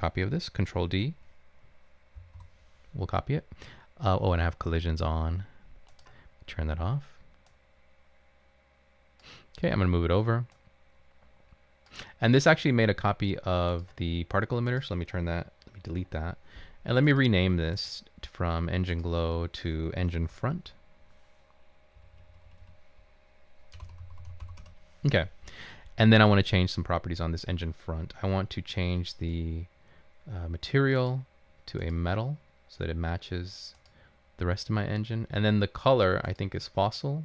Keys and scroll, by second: 2.2 ctrl+d, 2.3 typing, 16.0 Delete, 20.6 Right, 22.0 Delete, 22.4 Delete, 23.6-25.0 typing, 28.9 typing.